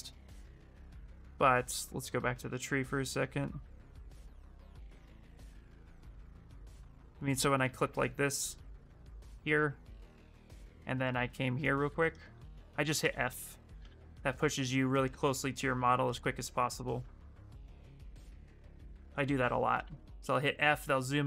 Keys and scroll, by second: 7.9 ctrl+shift+space, 10.9-13.9 typing, 19.1 f, 19.5 f.